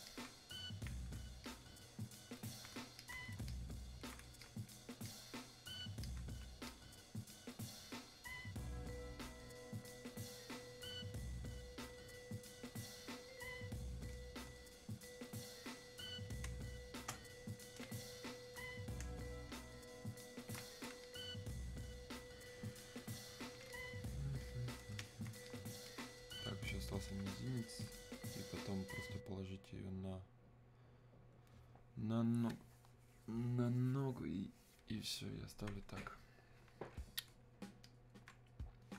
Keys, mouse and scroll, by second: 1.4-16.4 ctrl+shift+drag, 16.4 ctrl+shift+space, 21.0-23.7 shift+drag, 23.7-37.8 shift+drag, 37.8-38.9 alt+drag.